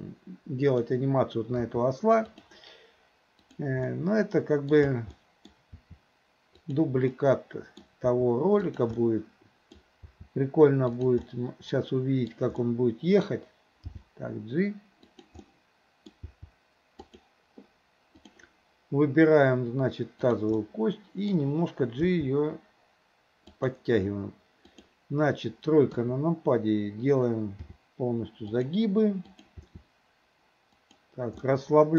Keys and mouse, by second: 1.7 r, 3.5 click, 3.9-4.8 middle drag, 5.2-5.6 middle drag, 5.8 r, 7.2-7.9 middle drag, 8.1 r, 9.0-9.8 middle drag, 10.1 r, 11.3-11.7 middle drag, 12.7-13.3 middle drag, 13.9 g, 15.4-16.1 middle drag, 16.2 g, 18.3 click, 20.2 click, 20.6 middle click, 22.1 g, 24.8 click, 26.0 KP_3, 27.7 r, 29.4 click, 29.7 r, 31.5-31.9 middle drag.